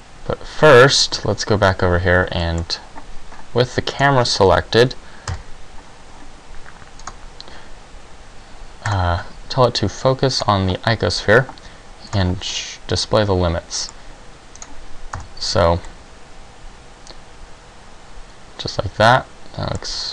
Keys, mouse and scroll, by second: 1.3 ctrl+Right, 2.6 middle click, 4.2 right click, 5.4 KP_0, 7.2 click, 9.0 click, 12.1 click, 12.6 middle click, 14.8 right click, 15.2 KP_Decimal, 16.0 middle click.